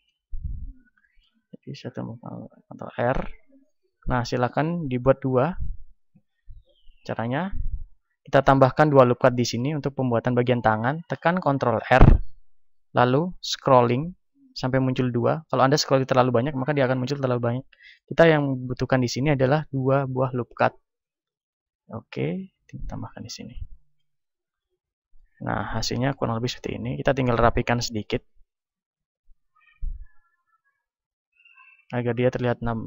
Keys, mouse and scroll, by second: 0.3 a, 1.8 ctrl+r, 2.7-22.4 middle drag, 2.7-4.1 scroll up 1, 4.1-4.7 scroll down 1, 4.7-5.0 scroll down 1, 5.0 scroll up 1, 7.5 Escape, 12.3 ctrl+r, 22.4-23.9 drag, 23.7-27.9 middle drag, 24.3 a, 27.9 click, 27.9-32.8 right drag, 30.3 click, 32.7-32.8 drag.